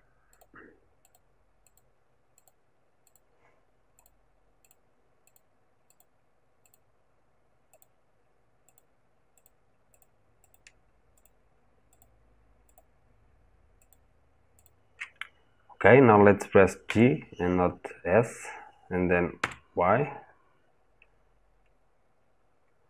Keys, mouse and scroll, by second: 16.6 g.